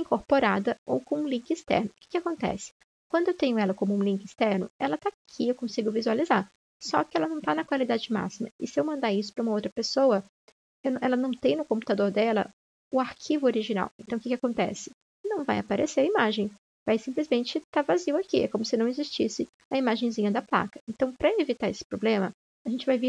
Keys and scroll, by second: 18.6 Delete, 20.5 ctrl+z, 20.5 Delete.